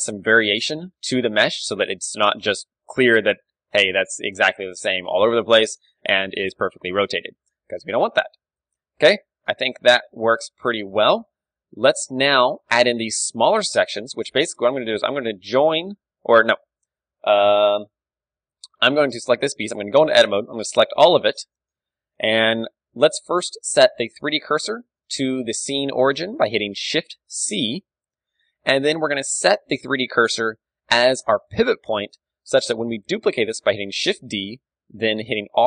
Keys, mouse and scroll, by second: 0.8 middle click, 1.7 KP_1, 1.9-3.9 middle drag, 5.1-12.4 middle drag, 7.1 KP_3, 13.8 Tab, 14.3 z, 14.7 Tab, 15.2-18.7 middle drag, 19.8 Tab, 20.2 a, 21.1 a, 23.5 middle click, 24.7 shift+v, 27.0 shift+c, 28.1-30.4 middle drag, 30.4-32.0 drag, 32.0-33.9 middle drag, 34.1 shift+d.